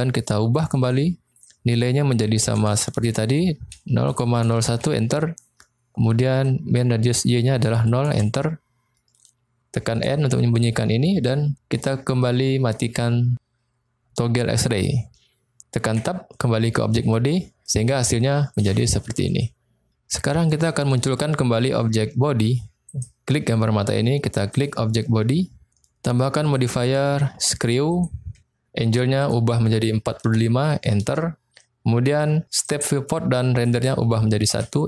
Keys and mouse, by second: 0.9-5.3 drag, 2.7 BackSpace, 6.3-9.0 drag, 10.0 n, 14.7 click, 15.9 Tab, 17.4 middle click, 20.6 middle click, 22.7 click, 26.5-31.7 drag, 32.7-34.8 drag.